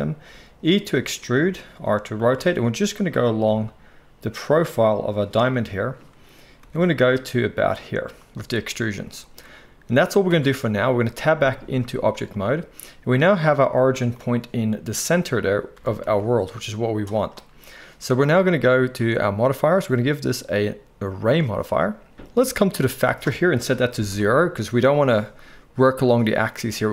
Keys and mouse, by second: 0.3 e, 1.5 r, 2.4 g, 3.4 e, 6.6 e, 10.2 Tab, 11.3 z, 14.1-19.0 middle drag, 15.7 r, 19.0 click, 19.2 middle click, 19.8-26.9 drag.